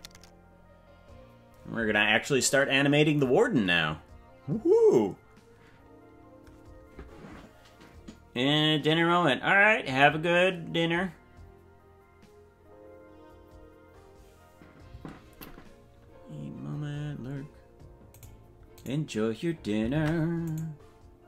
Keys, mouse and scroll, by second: 1.1 click, 18.4 right click, 19.4 right click, 20.2 ctrl+Tab, 21.0 right click.